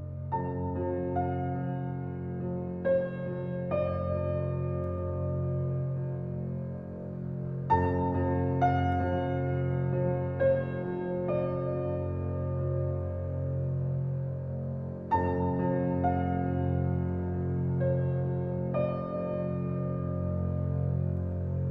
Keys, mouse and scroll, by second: 4.9 g, 7.6 g, 10.2 click, 12.0-13.3 drag, 19.7 click, 20.7 g.